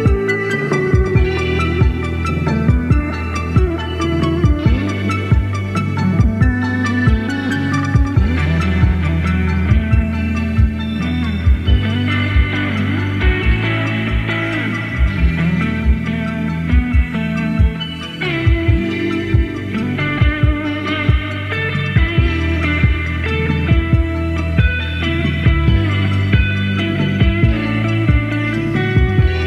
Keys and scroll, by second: 6.1 super+c, 6.3 super+v, 7.0 Down, 7.2 Left, 7.4 Left, 7.6 Left, 13.1 super+d, 25.7 super+d, 28.6 Right.